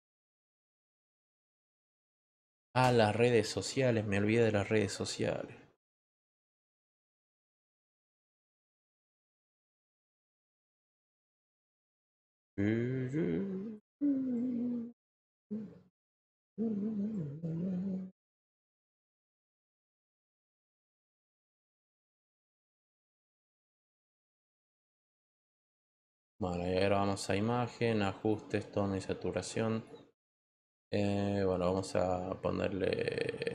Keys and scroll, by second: 25.6 Return.